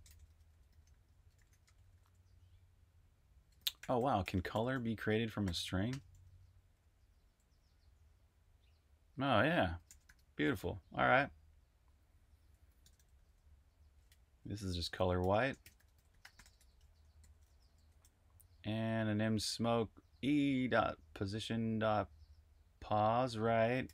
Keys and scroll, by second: 0.0-6.9 typing, 9.3-10.3 typing, 11.6-14.0 typing, 15.2-19.7 typing, 23.0-23.9 typing.